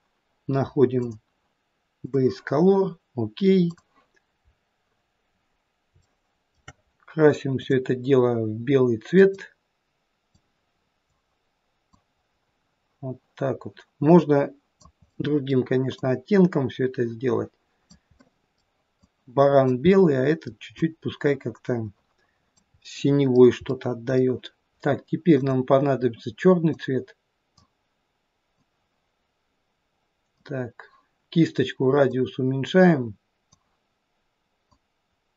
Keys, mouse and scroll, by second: 1.1 click, 4.5-5.9 scroll up 2, 6.1 shift+middle click, 7.6 click, 12.1 click, 15.1 middle click, 16.3 click, 19.2 middle click, 20.0 middle click, 21.0 click, 22.9 middle click, 23.7 middle click, 25.3 click, 32.1 click, 34.8 click.